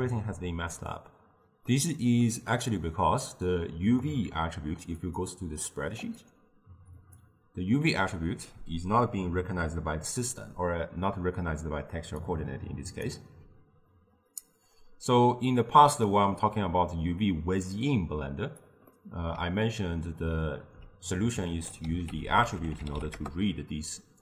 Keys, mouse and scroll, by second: 1.7-3.4 middle drag, 3.4-7.2 drag, 12.3 click, 17.8-19.0 drag, 19.0-21.6 middle drag, 21.6 ctrl+a, 22.3 t.